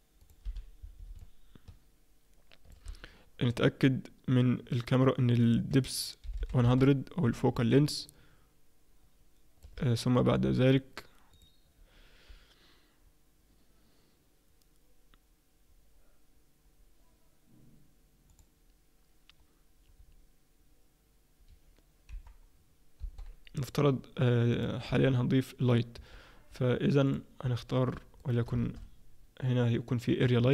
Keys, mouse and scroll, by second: 0.5 n, 1.2 shift+middle click, 5.3 click, 6.4 0, 7.7 ctrl+middle click, 11.3 click, 24.5 click, 24.9 KP_0, 26.1-27.1 scroll up 5, 27.1 click, 27.1-27.5 scroll up 1, 27.5 scroll down 1, 28.2 shift+right click, 28.2 scroll down 2, 28.6 shift+a.